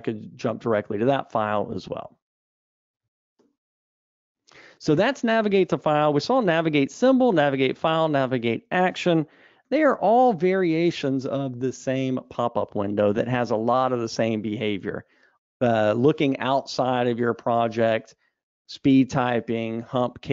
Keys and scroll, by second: 3.7 super+e.